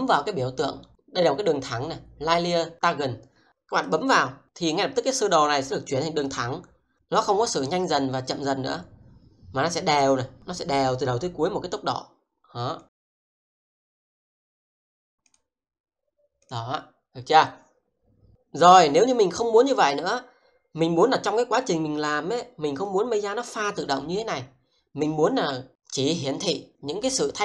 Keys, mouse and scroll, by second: 3.5 click, 12.9 click, 21.6 click.